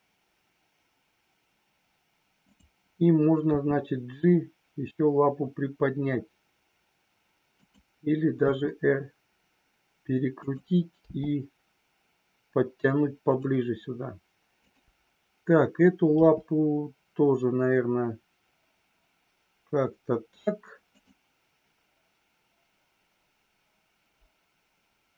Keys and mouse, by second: 2.4 click, 8.4 r, 11.0 g, 13.3 click, 14.5 click, 16.1 g.